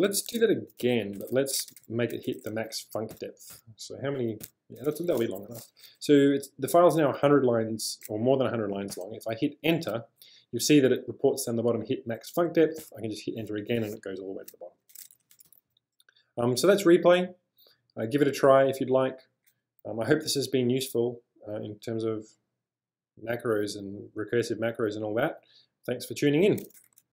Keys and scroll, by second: 0.0-4.4 typing, 9.0 Return, 12.9 Return, 14.6-16.7 typing.